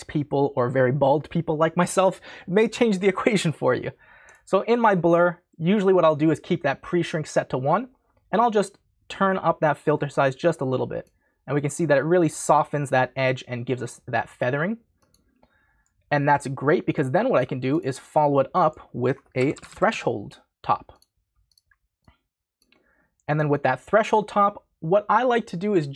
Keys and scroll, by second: 19.1-20.4 typing.